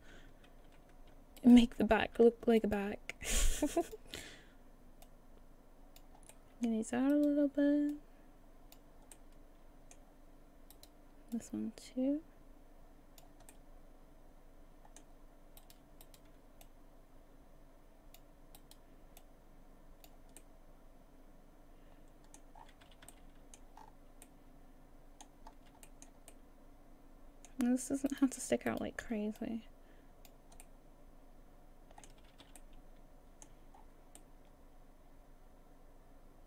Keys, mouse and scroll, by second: 1.4 shift+right click, 2.6 shift+right click, 3.8 click, 5.0 click, 6.3 middle click, 7.1 right click, 7.9 click, 9.1 middle click, 10.7 right click, 11.3 click, 13.5 middle click, 15.6 right click, 16.0 shift+right click, 16.6 click, 18.6 right click, 19.2 click, 20.4 middle click, 22.5-22.8 scroll down 7, 22.8 a, 23.0 a, 23.1 middle click, 23.8 scroll up 5, 24.2 middle click, 25.5-25.9 scroll up 2, 25.9 shift+middle click, 26.3 middle click, 28.1 middle click, 28.7 shift+right click, 29.4 click, 30.3 right click, 30.6 middle click, 32.2 a, 32.4 a, 32.6 middle click, 32.6 a, 33.7-34.2 scroll down 6, 34.2 middle click.